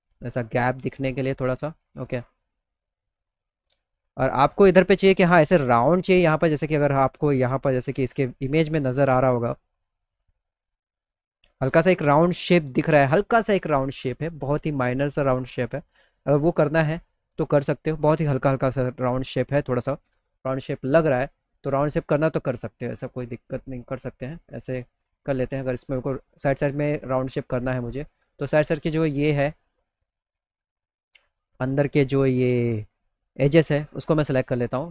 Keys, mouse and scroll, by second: 0.1 click, 1.3 click, 1.6 middle click, 2.7 middle click, 3.1 middle click, 3.5 middle click, 3.8 middle click, 4.1 middle click, 4.5 middle click, 9.7 click, 11.6 right click, 20.7 click, 23.6 click, 24.8 click, 25.3 middle click, 25.6 middle click, 27.4 ctrl+click, 27.7 middle click, 28.1 middle click, 28.5 middle click, 28.8 alt+middle click, 30.0 ctrl+click, 33.0 ctrl+click, 33.3 alt+middle click.